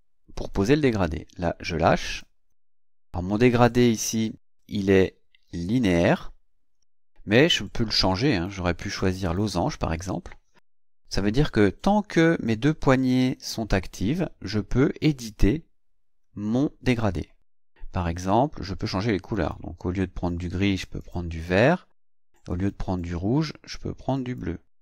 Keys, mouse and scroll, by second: 9.2 click, 19.3 click, 21.0 click, 22.5 click, 24.1 click.